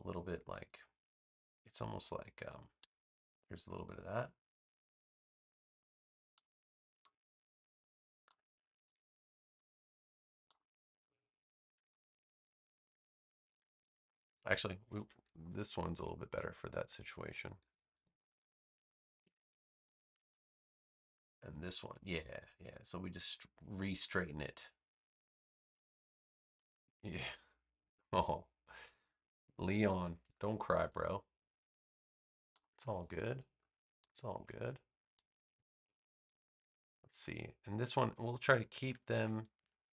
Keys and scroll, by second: 2.7 BackSpace, 8.8 v, 11.7 space, 13.7 super+v, 14.9 super+z, 15.4 space, 17.6 super+c, 17.9 space, 19.2 super+v, 23.9 a, 30.2 v, 33.3 space, 39.0 super+c, 39.5 space.